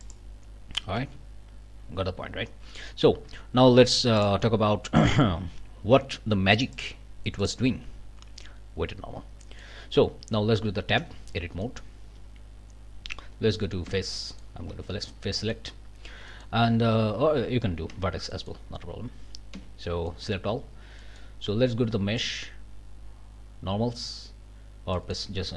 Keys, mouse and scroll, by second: 0.0 click, 1.0 ctrl+z, 2.2-2.8 scroll up 4, 2.8 click, 4.2 click, 4.8 scroll up 2, 5.1 click, 6.7 click, 7.4 click, 9.4 click, 9.8 scroll up 1, 11.0 Tab, 11.3 middle click, 11.6 click, 13.9 3, 14.2 click, 14.7 alt+a, 15.0 alt+middle click, 15.3 alt+scroll up 1, 15.4 middle click, 15.8-16.1 scroll down 1, 16.3 middle click, 16.7-17.0 scroll up 1, 17.9 1, 18.3 middle click, 19.5 a, 20.1 click, 21.0 click, 22.2 click, 24.9 click.